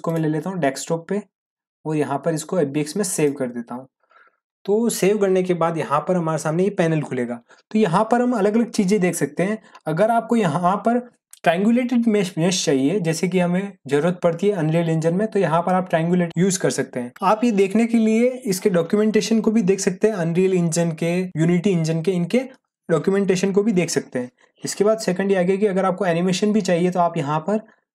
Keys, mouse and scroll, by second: 0.0 click, 3.1 click, 24.7 click, 26.6 scroll down 1.